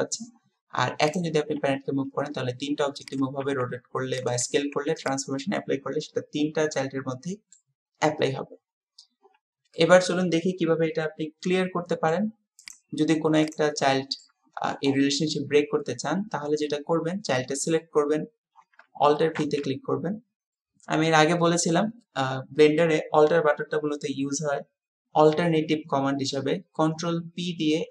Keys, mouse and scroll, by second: 1.0 click, 1.6 g, 3.5 r, 4.4 s, 6.8-7.6 middle drag, 9.7-12.2 middle drag, 13.9-14.3 shift+middle drag, 19.4 alt+p.